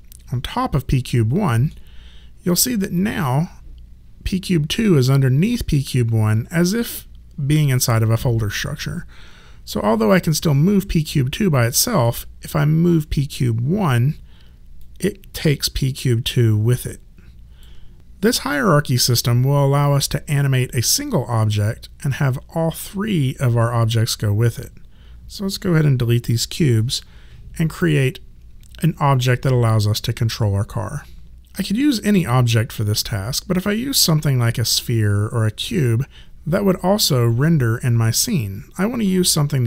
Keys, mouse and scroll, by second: 3.0 click, 10.5 click, 13.0 click.